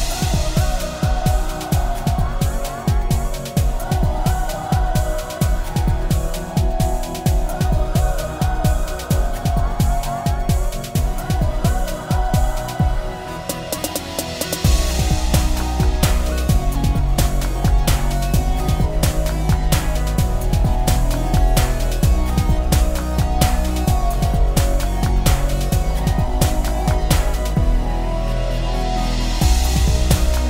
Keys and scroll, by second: 28.6 ctrl+z.